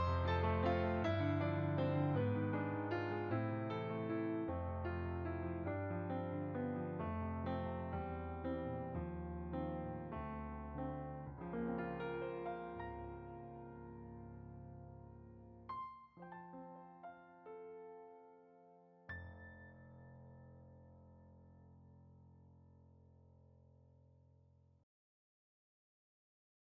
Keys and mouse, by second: 0.7 click, 1.5 middle click, 3.1 click, 5.0 shift+click, 5.7 middle click, 6.5 shift+click, 7.4 middle click, 8.0 shift+click, 11.1 click, 13.1 f, 13.2 click, 17.3 click, 19.1 click.